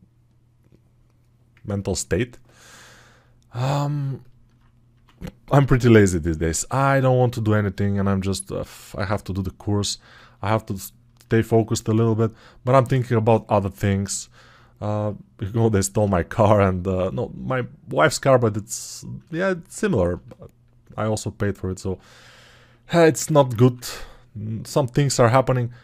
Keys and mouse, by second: 6.6 ctrl+[.